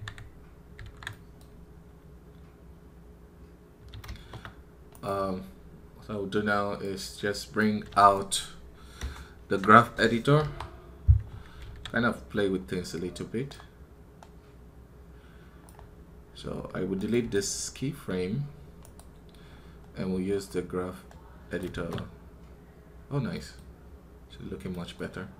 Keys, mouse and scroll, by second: 4.8 right click.